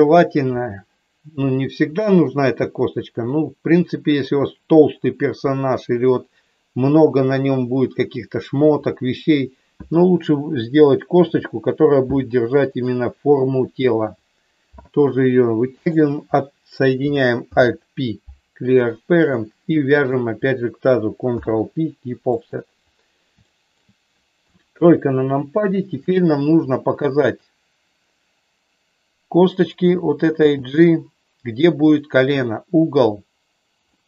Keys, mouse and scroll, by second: 11.3 e, 12.7 click, 15.9 click, 17.4 alt+p, 19.9 shift+click, 21.4 ctrl+p, 23.4 shift+middle click, 24.4 KP_3, 30.4 g, 31.8 click, 33.9-34.0 middle drag.